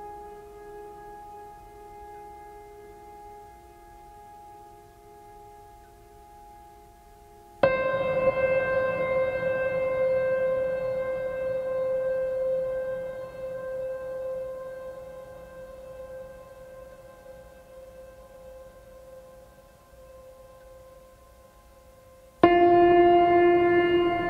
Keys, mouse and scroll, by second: 0.4 right click, 0.8 right click, 7.5 right click, 13.1 right click, 13.9 right click, 14.4 right click, 23.4 right click.